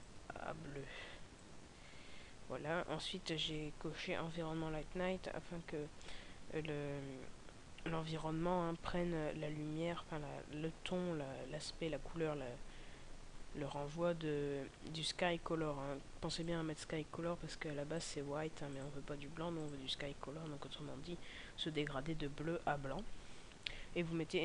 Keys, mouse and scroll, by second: 3.0-5.1 scroll down 4, 18.8 click, 20.6 scroll down 1, 20.8 scroll up 1.